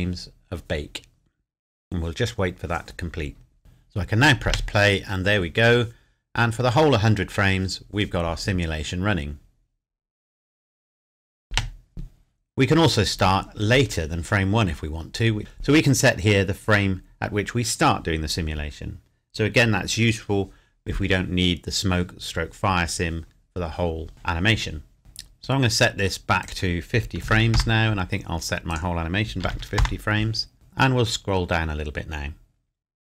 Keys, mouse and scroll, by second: 4.4 space, 11.5 space, 25.0 scroll up 1, 26.4 click, 27.2 KP_5, 27.5 KP_Enter, 27.9 scroll up 1, 28.7 click, 29.4 KP_5, 29.5 KP_0, 29.8 KP_Enter, 30.5 scroll down 1.